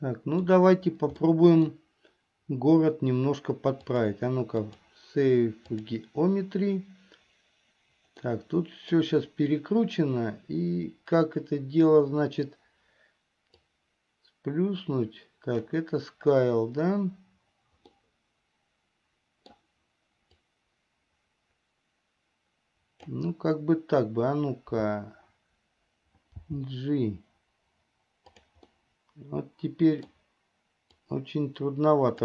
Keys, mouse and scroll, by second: 0.0 middle click, 1.5 middle click, 4.0-6.2 drag, 8.4 middle click, 13.7 click, 13.9-15.9 drag, 18.2-19.7 middle drag, 20.6-23.4 drag, 26.7 g, 28.9-30.4 middle drag, 31.3-32.2 drag.